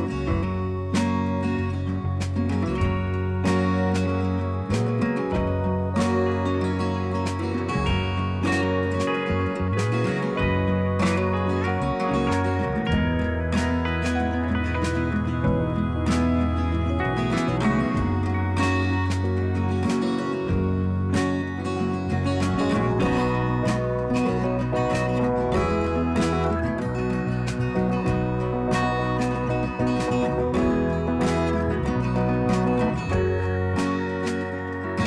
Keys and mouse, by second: 0.7 click, 2.3 click, 8.1 click, 9.2-10.5 drag, 14.7 click, 17.0 click, 20.3 click, 22.3 click, 24.5 click, 24.5 click, 26.3 click, 28.8 click, 31.6 click, 33.2 click, 34.8 click.